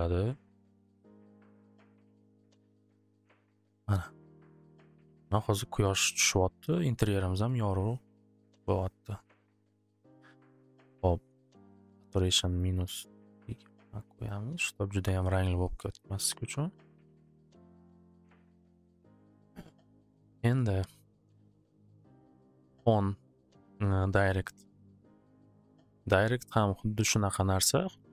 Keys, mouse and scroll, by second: 4.2 click, 5.6-7.6 drag, 8.4 click, 9.7 click, 11.8 click, 12.3 click, 12.6 click, 12.6-13.6 typing, 12.7 click, 13.7 Return, 14.1 click, 14.3 click, 16.0 click, 17.7-18.5 typing, 19.7-20.8 drag, 22.4-24.4 drag, 25.5 click.